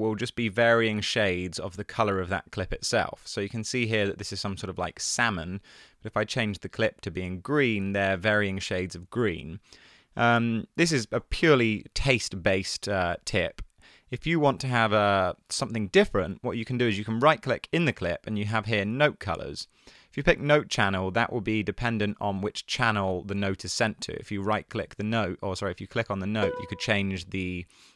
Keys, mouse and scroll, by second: 9.1 super+z.